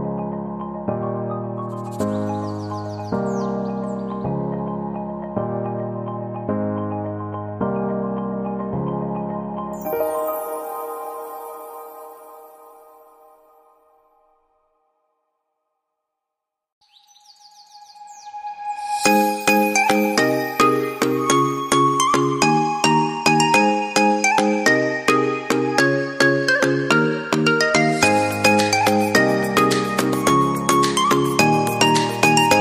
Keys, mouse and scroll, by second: 5.8 right click, 11.3 shift+Page_Up, 17.4 right click, 18.9 ctrl+Down, 19.6 ctrl+Left, 20.5 ctrl+Right, 26.0 shift+Page_Up.